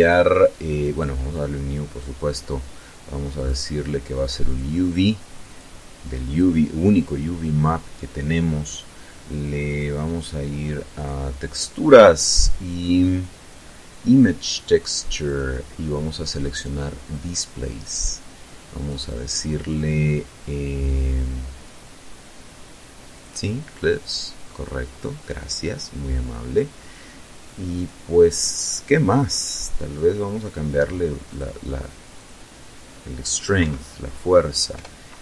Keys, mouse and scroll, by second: 2.4 click, 3.5 click, 4.5 click, 5.2 click, 9.9 click, 14.3 click, 16.0 click, 17.9 click, 22.1 click, 26.7 click, 30.3 click, 31.1 click, 32.6 Right, 33.7 BackSpace, 34.6 2, 34.7 Return.